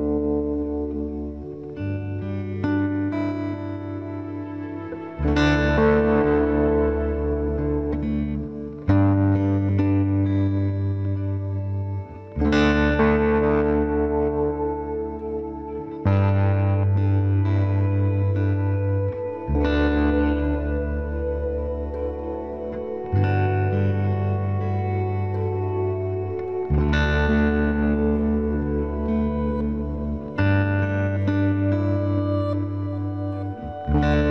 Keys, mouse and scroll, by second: 3.2-5.0 right drag, 4.8 c, 6.1-7.3 middle drag, 7.3-9.3 right drag, 7.8 c, 12.9 right click, 13.1-14.5 drag, 14.5 middle click, 14.6 click, 14.8-16.6 middle drag, 15.5 e, 22.9-24.6 right drag, 23.5 KP_Decimal, 24.8-26.4 middle drag, 24.8 b, 26.3 g, 28.7 right click, 28.9 b, 29.3 g, 31.8 b, 32.1 g, 32.3 right click, 33.7-34.3 right drag, 33.9 b.